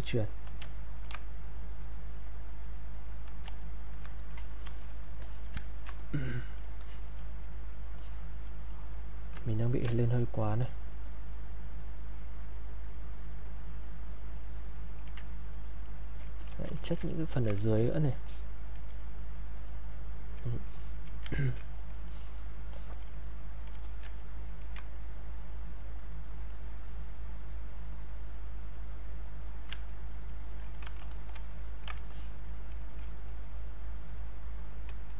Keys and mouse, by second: 0.8 ctrl+right click, 1.5-3.7 drag, 3.7 ctrl+right click, 4.2 click, 5.2 alt+click, 5.7 ctrl+right click, 6.0 click, 7.9 alt+click, 8.6 click, 9.4 ctrl+right click, 9.9-15.4 drag, 15.4 ctrl+right click, 16.4 click, 17.1 ctrl+right click, 17.7 alt+click, 19.1-20.6 drag, 21.4 ctrl+right click, 22.1 alt+click, 23.2 click, 23.8 alt+click, 24.1 ctrl+right click, 24.9-29.9 drag, 29.9 ctrl+right click, 30.7 click, 31.5 right click, 32.1-35.1 drag.